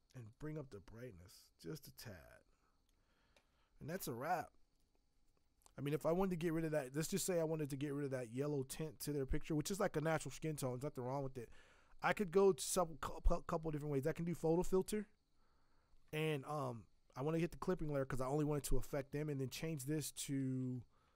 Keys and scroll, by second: 20.6 Escape.